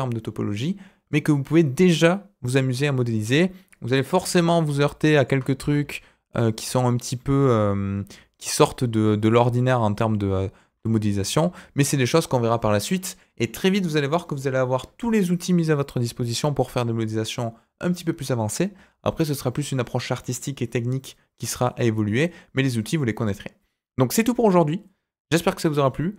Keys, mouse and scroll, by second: 4.1 Tab, 5.1 alt+click, 5.6 s, 9.5 scroll down 1, 9.7 middle click, 10.6 Tab, 11.1-13.1 middle drag.